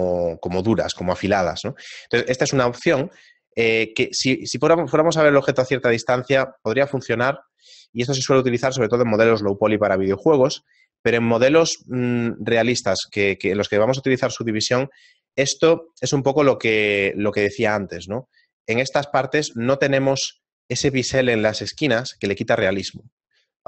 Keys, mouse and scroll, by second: 2.7 shift+middle click, 3.3 middle click, 3.8-4.5 scroll down 12, 6.4-7.7 scroll up 12, 8.9 shift+middle click.